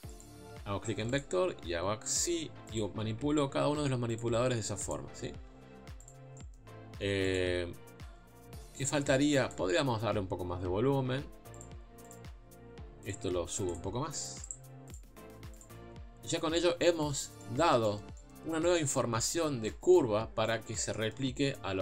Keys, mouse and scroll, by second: 0.2 v, 1.2 click, 1.3 g, 2.8 click, 3.0 g, 4.9 click, 5.2-5.5 scroll down 1, 5.5 s, 6.3 g, 7.7-8.7 scroll up 2, 8.7-9.3 scroll down 1, 9.3 scroll down 1, 9.5 click, 9.9 s, 12.1 click, 12.3 g, 13.7 click, 14.9 click, 15.1 g, 15.8 Tab, 16.3 scroll down 3, 16.8 middle click, 17.3 scroll up 1, 17.4-18.5 middle drag, 18.5 scroll up 1, 18.6 middle click, 19.2-19.6 scroll down 1, 19.6 middle click, 20.3 scroll up 1, 20.4-21.8 middle drag.